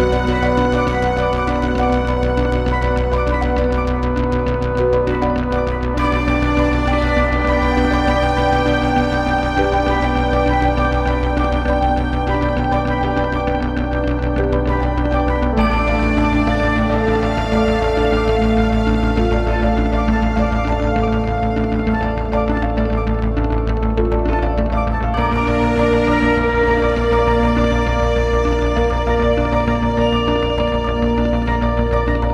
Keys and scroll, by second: 1.6 Delete.